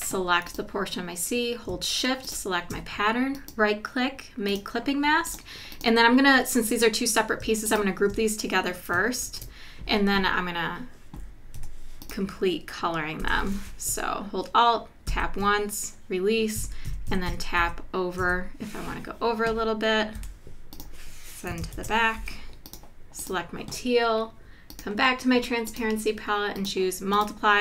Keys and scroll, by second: 9.2 super+g, 11.5 i, 13.2 v, 15.1 alt+Down, 16.6 Down, 17.6 Left, 20.2 i, 21.7 shift+super+[, 22.2 v.